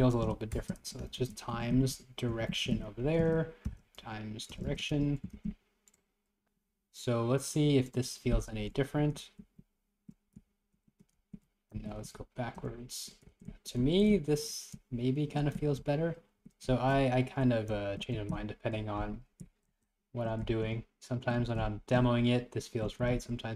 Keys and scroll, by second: 9.1 Up, 9.3 Left, 9.5 Up, 10.4 Left, 10.9 Right, 11.2 Left, 11.8 Right, 12.1 Down, 12.2 Left, 13.0 Right, 13.3 Left, 13.5 Right, 13.9 Right, 14.2 Left, 14.8 Right, 15.6 Left, 15.8 Right, 16.7 Right, 17.0 Left, 17.8 Right, 18.2 Right, 18.4 Left, 19.5 Left, 19.7 Right, 20.5 Left, 20.9 Right, 21.5 Right, 21.6 Left, 22.0 Right, 23.1 Up, 23.2 Right.